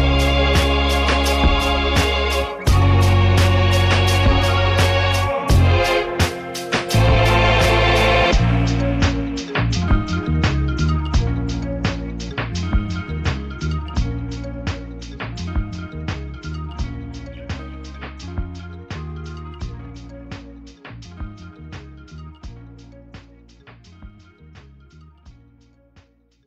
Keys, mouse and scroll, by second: 0.0 click, 1.3 click, 2.6-5.5 drag, 6.1 F1, 6.5 click, 9.5 click, 13.9 click, 18.0-24.5 drag, 26.0-26.4 drag.